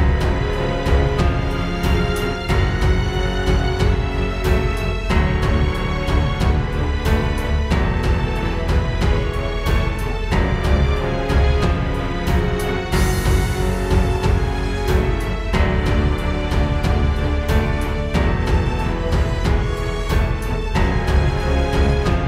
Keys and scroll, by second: 0.1 alt+super+space, 0.3 alt+super+space, 1.2 super+space, 1.3 super+space, 1.6 super+space, 1.8 super+space, 4.9 super+[, 5.5 space, 7.7 space, 8.2 space, 11.7 space.